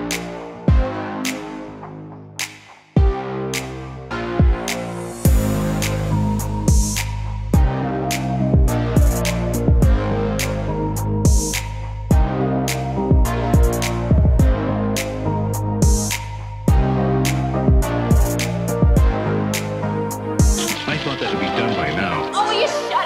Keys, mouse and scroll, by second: 0.2 click, 0.8-1.9 middle drag, 0.9 typing, 2.8 r, 3.0 z, 3.9-4.3 middle drag, 4.4 Tab, 4.6 middle drag, 4.8 click, 5.0 middle click, 5.6 click, 8.5 click, 8.9 drag, 8.9-9.7 typing, 9.5 ctrl+click, 10.6 click, 11.5 right click, 11.6 middle click, 15.4-15.8 middle drag, 16.3 click, 17.6 ctrl+click, 18.4 click, 18.9 middle click, 19.5 Tab, 20.1 Escape, 20.5 click, 21.1 g, 21.2 z, 22.7 click, 22.9 middle click.